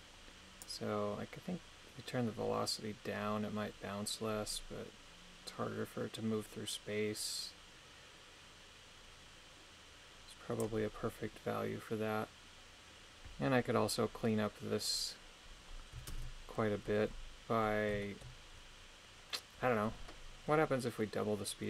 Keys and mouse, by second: 0.6-10.6 drag, 16.1 shift+space, 18.0 shift+middle click.